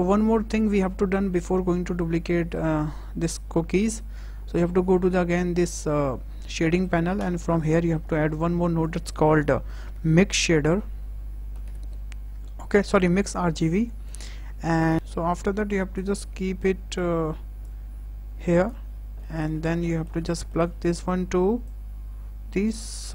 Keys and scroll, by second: 8.1 shift+a, 9.8 m, 11.4 i, 11.7 x.